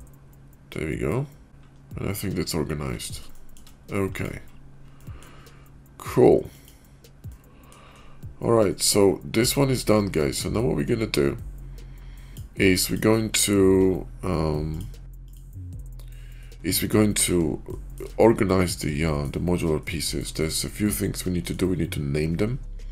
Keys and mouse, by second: 3.2 shift+click, 3.9 click, 4.8-5.1 middle drag, 6.4 click, 7.1 middle click, 9.3 click, 10.1 middle click, 12.8 click, 14.6 click, 16.1 shift+middle drag, 17.6 shift+middle click, 18.5-19.1 middle drag, 19.7-20.1 shift+middle drag, 20.3-21.4 middle drag.